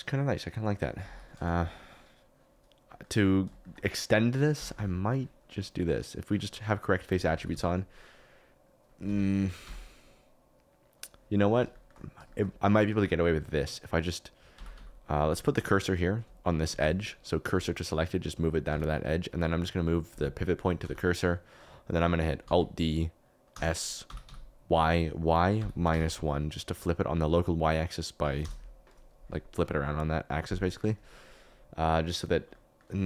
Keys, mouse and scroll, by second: 1.1 ctrl+s, 2.8 click, 3.6 shift+click, 4.5 Tab, 4.7 2, 5.7 click, 7.0 g, 7.3 y, 7.5 y, 9.0 Escape, 9.6 Tab, 11.7 shift+right click, 12.4 shift+right click, 13.2 shift+right click, 14.5 Tab, 14.7 a, 15.2 2, 16.6 shift+s, 18.6 Tab, 20.1 click, 22.4 alt+d, 23.5 s, 24.0 y, 24.2 y, 25.5 -, 25.9 1, 28.4 Return, 32.2 KP_Decimal.